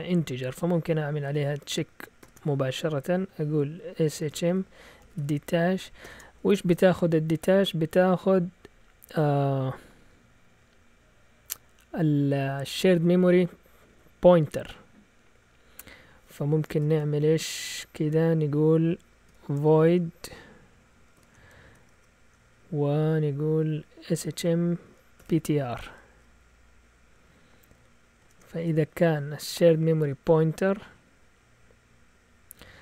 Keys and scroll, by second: 1.0-2.1 typing, 3.9-5.9 typing, 16.8 typing, 19.0-22.4 typing, 23.8-26.5 typing, 28.2 shift+Tab, 30.0 BackSpace.